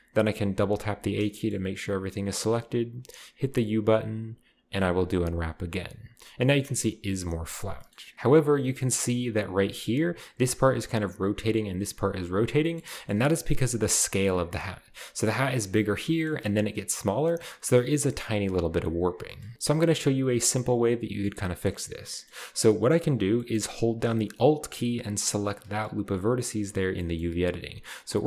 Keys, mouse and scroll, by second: 0.5 a, 0.9 a, 1.3-1.9 shift+middle drag, 1.9-2.5 shift+scroll down 1, 2.5 scroll down 1, 2.5-3.5 scroll up 1, 2.6-3.5 typing, 5.1 click, 6.1-7.8 scroll down 1, 7.8 middle click, 7.9 scroll up 1, 8.1-9.3 right drag, 9.3 a, 9.6 a, 12.6-14.5 shift+middle drag, 13.1-14.5 shift+scroll up 1, 14.5 z, 16.1-19.1 shift+middle drag, 19.3 shift+middle click, 19.5-20.0 scroll down 1, 19.5 a, 20.0-23.0 scroll up 1, 23.0-23.9 scroll down 1, 25.4-26.3 alt+right drag, 27.0-28.2 middle drag.